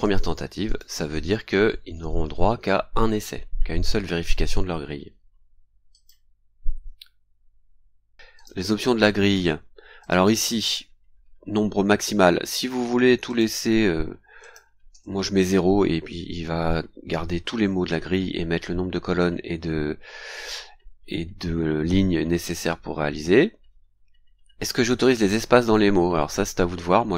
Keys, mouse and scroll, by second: 0.4 click, 5.6 click, 6.8-7.1 scroll down 2, 7.5 scroll down 2, 8.3 click, 9.1-9.4 scroll down 1, 10.0 click, 12.9 KP_0, 13.2 click, 13.6 KP_0, 14.4 click, 14.9 KP_0.